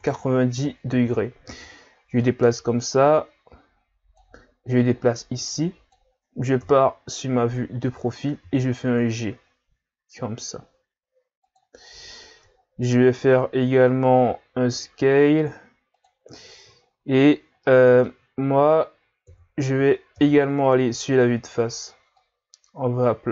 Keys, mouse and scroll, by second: 2.2-6.6 drag, 6.6 KP_3, 8.4 g, 11.8-12.5 scroll up 3, 12.5-13.8 scroll down 10, 13.8 s, 16.9 scroll down 1, 17.2-17.6 scroll up 2, 17.6 middle click, 18.4-19.3 scroll down 2, 19.3 KP_3, 20.1 KP_1, 21.1-21.9 scroll up 1, 21.9 scroll up 1, 22.2 click.